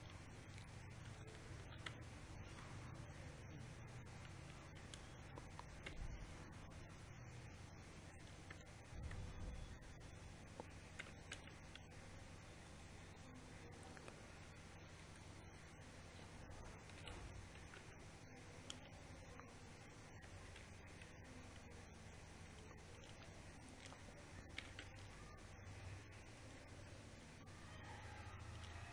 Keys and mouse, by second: 0.0 g, 2.7-5.0 middle drag, 5.0 z, 5.5 a, 6.6 b, 11.7 g, 14.9-17.8 middle drag, 15.6 KP_7, 17.8 KP_3, 18.2 Tab, 18.4 z, 19.4 a, 21.2 KP_8, 21.8 KP_6, 25.2 e.